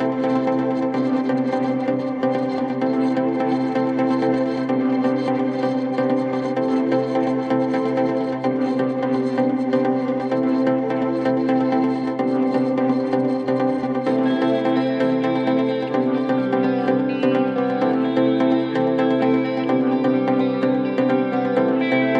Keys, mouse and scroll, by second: 3.2 shift+click, 7.2-9.1 click, 12.4 shift+click, 15.3 click, 15.6 space, 16.0-16.3 click, 16.1 space, 17.0-17.9 click, 19.4-20.0 click, 21.8 click.